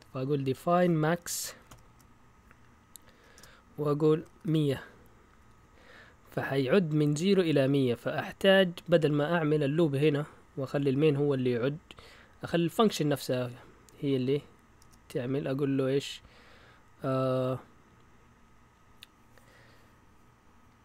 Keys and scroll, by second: 1.2-2.1 typing, 3.3-5.9 typing, 7.4-9.4 typing, 12.4-14.8 typing.